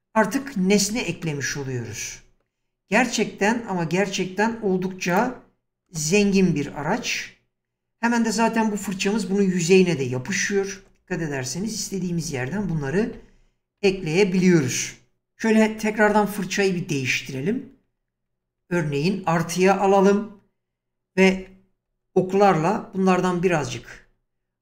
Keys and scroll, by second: 5.9 space, 10.7 space, 12.3 ctrl+z, 16.0 typing, 17.4-18.6 typing, 21.9 Right.